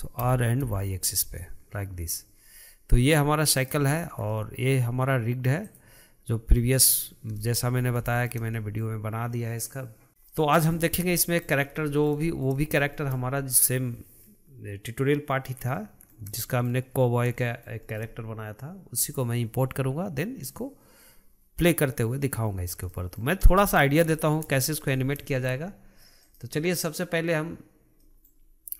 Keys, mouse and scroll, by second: 0.3 r, 4.0-4.3 scroll down 1, 4.3-5.6 middle drag, 5.6 click, 6.8-7.8 middle drag, 7.8-8.1 scroll up 2, 8.1-10.1 shift+middle drag, 11.3-11.7 middle drag, 11.7 scroll down 2, 12.0-21.1 shift+middle drag, 23.0-23.5 middle drag, 23.5-23.8 scroll up 2, 23.8-26.3 shift+middle drag, 26.3-28.1 right drag, 28.1-28.7 middle drag.